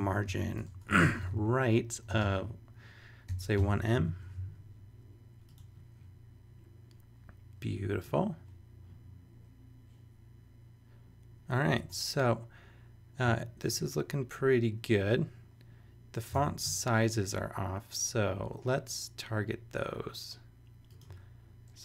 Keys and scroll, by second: 0.0-4.3 typing, 11.8 super+Tab, 16.4 super+Tab.